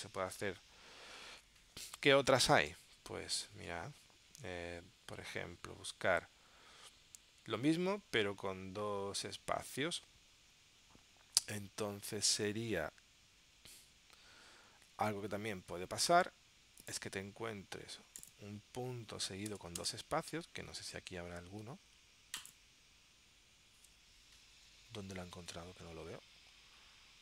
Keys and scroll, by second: 2.9 super+Tab, 15.1 super+Tab.